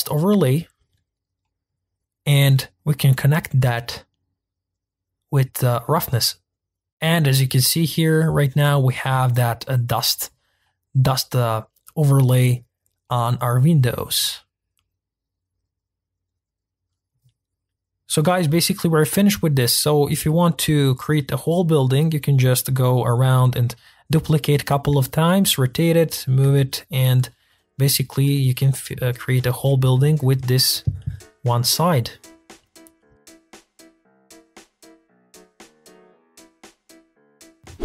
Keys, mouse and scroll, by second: 0.0-0.5 drag, 2.2-7.4 middle drag, 7.4-7.8 scroll down 1, 7.8-8.8 middle drag, 8.8 scroll down 2, 9.1-10.3 middle drag, 10.3-10.6 scroll up 3, 10.6-12.6 middle drag, 12.6-13.0 scroll down 3, 13.0 middle click, 13.4-13.8 scroll up 3, 13.8-14.2 scroll down 3, 14.2-17.2 middle drag, 17.2 scroll down 3, 17.4 middle click, 17.6 scroll up 3, 17.7 middle click, 18.2 click, 18.3 scroll down 1, 18.4 shift+middle click, 18.6-20.6 typing, 19.1 middle click, 19.4 middle click, 20.0 click, 20.2 middle click, 21.2 middle click, 21.4 scroll up 2, 21.5-22.1 middle drag, 22.1 g, 22.4 middle click, 22.5 scroll down 2, 22.6 click, 22.7 shift+d, 23.2 click, 23.3 scroll up 3, 23.4 click, 24.0 shift+middle click, 24.3 scroll down 2, 24.4 shift+middle click, 24.7 click, 24.8 shift+click, 25.3 click, 25.3 g, 25.7 middle click, 25.9 g, 26.5 click, 26.7 shift+middle click, 26.9 scroll up 2, 27.0 middle click, 27.2 g, 27.4 click, 27.8 r, 28.8 click, 28.9 scroll up 2, 29.0 middle click, 29.1 click, 29.5 scroll down 1, 29.7 scroll up 1, 29.8 shift+middle click, 29.8 g, 30.3 click, 30.3 scroll down 1, 30.4-30.9 shift+middle drag, 31.9 shift+middle click, 32.2 middle click, 32.4-33.5 drag, 33.5 middle click, 33.5 scroll up 1.